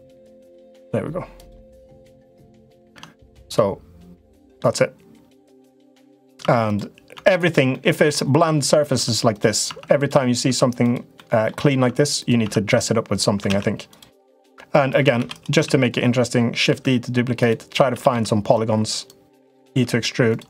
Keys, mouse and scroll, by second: 1.8 middle click, 2.7 Tab, 3.3 middle click, 5.4 middle click, 5.9 click, 6.2 Tab, 6.4 click, 6.9 Tab, 7.2 click, 7.5 middle click, 8.7 Tab, 9.4 Tab, 9.8 click, 10.2 Tab, 10.6 click, 10.9 middle click, 11.6 Tab, 11.9 click, 12.3 Tab, 12.5 click, 13.2 alt+z, 13.6 click, 14.2 middle click, 15.0 shift+d, 15.3 s, 17.6 s, 19.0 click, 19.5 e.